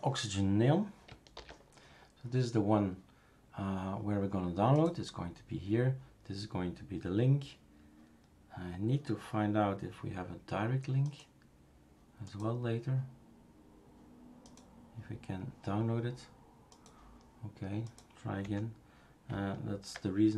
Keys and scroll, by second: 1.4 super+f, 18.4 Escape.